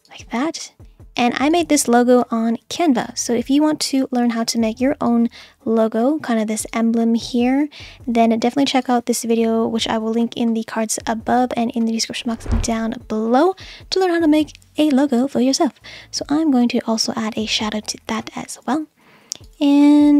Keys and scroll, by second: 4.0 super+z.